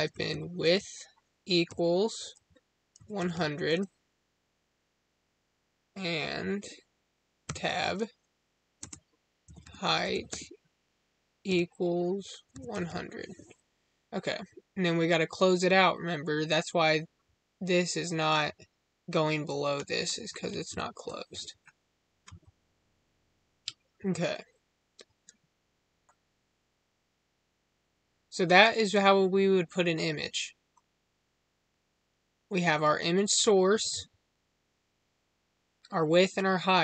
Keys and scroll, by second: 7.3 Tab, 8.7 space.